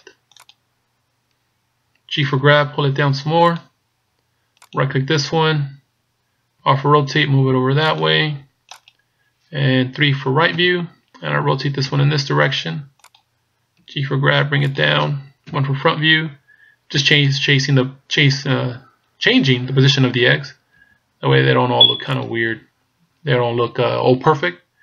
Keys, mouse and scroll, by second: 2.2 g, 4.8 right click, 6.9 r, 8.8 right click, 10.6 KP_3, 12.1 r, 13.8 g, 15.5 KP_1, 17.2 right click, 20.8 r.